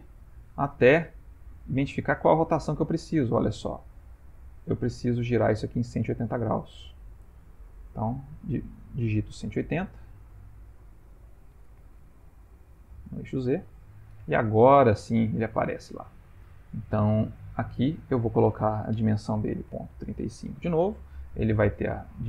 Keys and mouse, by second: 11.6 r, 15.0 Tab, 15.9 shift+middle click, 17.4 click, 18.7 click, 21.9 click.